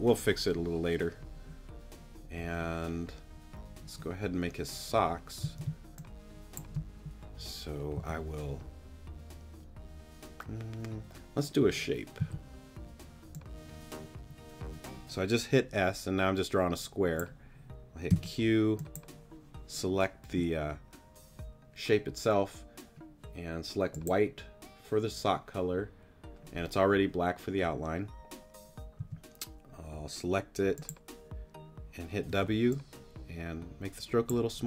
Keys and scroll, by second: 5.4 space, 7.9 a, 12.2 s, 18.1 q, 29.0 t, 32.3 w.